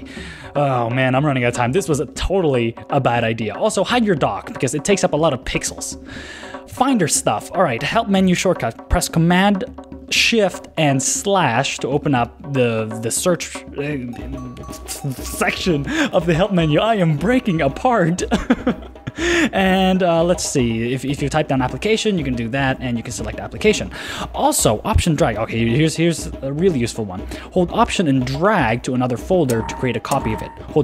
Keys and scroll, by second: 1.1 super+w, 10.5 shift+super+/, 21.6 Down, 25.3 super+n.